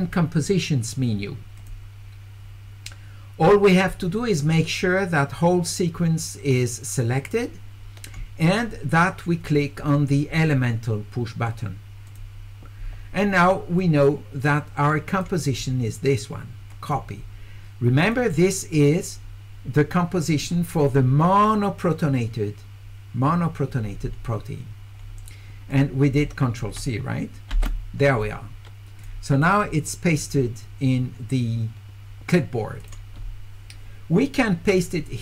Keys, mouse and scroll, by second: 1.6 click, 12.1 click, 13.8-15.2 drag, 15.4 right click, 16.7 click, 18.0 click, 25.7 click, 29.0 click, 30.1 click, 32.8 click, 34.7 click.